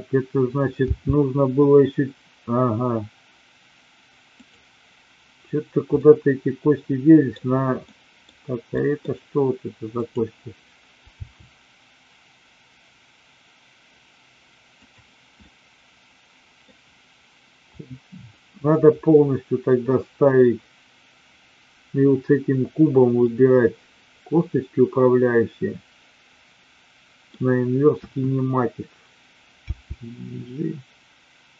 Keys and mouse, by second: 0.8 g, 6.0-7.2 middle drag, 7.8-8.2 middle drag, 8.7 middle click, 11.1 g, 15.5-16.7 middle drag, 17.7 click, 23.2-27.2 middle drag, 27.8 KP_1, 29.7 g.